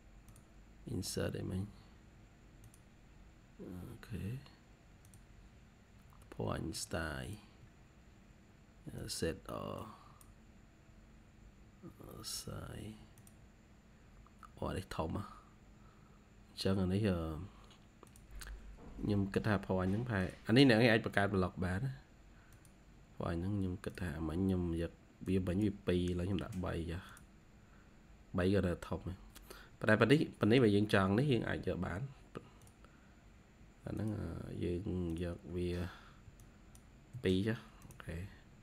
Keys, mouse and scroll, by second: 13.9-14.2 scroll down 2, 14.5-15.0 typing, 14.6-15.0 scroll down 2, 26.2 typing, 28.2 scroll up 1, 28.5 typing, 29.0 scroll up 1, 29.9-30.3 scroll down 1, 30.3 typing, 30.4 middle click, 37.0 typing, 38.5-38.6 scroll up 2.